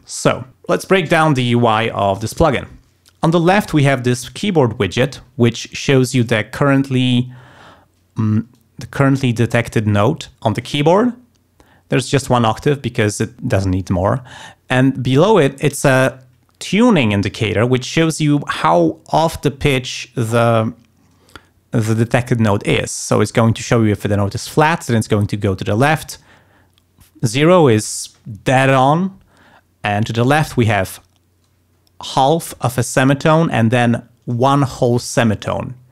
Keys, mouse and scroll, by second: 0.0 click, 8.5 click.